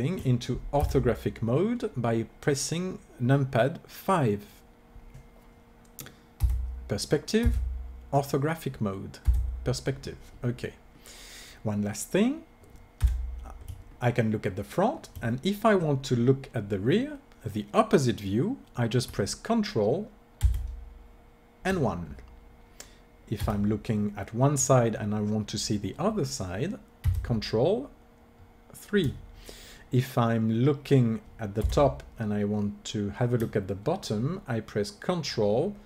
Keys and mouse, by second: 0.7 KP_5, 6.3 KP_5, 7.4 KP_5, 9.2 KP_5, 13.0 KP_1, 20.4 ctrl+KP_1, 23.2 KP_3, 27.0 ctrl+KP_3, 31.6 KP_7.